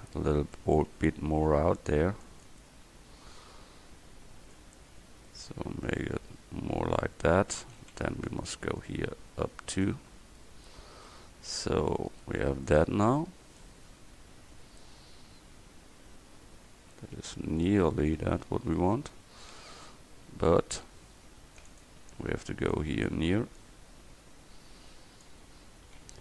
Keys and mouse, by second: 0.3 Tab, 1.4 a, 2.0 c, 7.6 a, 7.9 c, 8.9-9.9 drag, 11.2 Tab, 12.2-12.8 right drag, 17.9 Tab, 18.5 a, 19.5 c, 22.8-26.1 drag, 26.1 a.